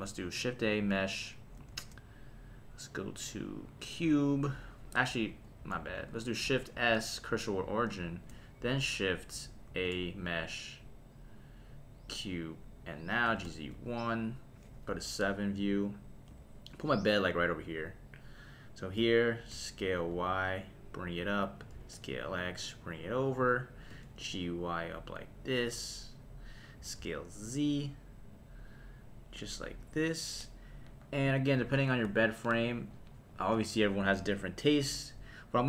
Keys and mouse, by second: 1.7 shift+a, 5.6 x, 6.7 shift+s, 9.7 shift+a, 13.2 g, 13.4 z, 13.7 KP_1, 14.1 click, 14.9 KP_7, 16.3 g, 18.8 click, 19.5 s, 20.0 y, 21.3 click, 21.7 s, 21.9 x, 23.3 click, 23.9 g, 24.2 y, 25.2 click, 26.8 s, 27.0 z, 29.6 click.